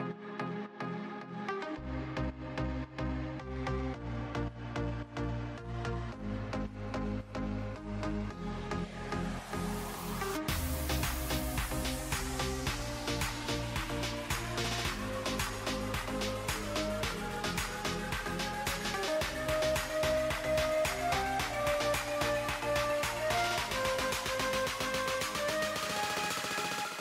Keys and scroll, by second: 6.6 space, 8.3 ctrl+z, 11.0 space, 13.5 space, 15.4 ctrl+z, 19.9 ctrl+shift+[, 20.0 ctrl+].